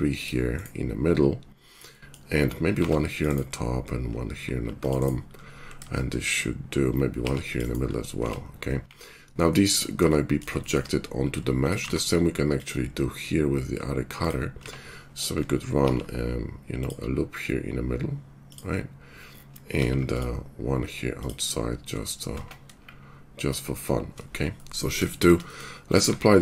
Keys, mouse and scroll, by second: 2.7 ctrl+r, 4.4 ctrl+r, 8.2 Tab, 8.8 shift+2, 11.2 click, 11.8 q, 14.5 Tab, 15.8 ctrl+r, 19.7 ctrl+r, 22.3 Tab, 24.7 shift+2, 26.1 q.